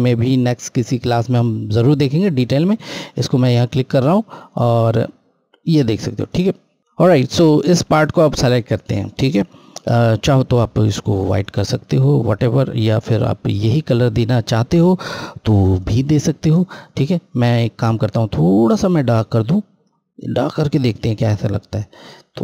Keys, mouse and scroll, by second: 2.6 click, 6.6 scroll, 6.8 click, 11.0 click, 18.1 click, 18.2 click, 21.7 click.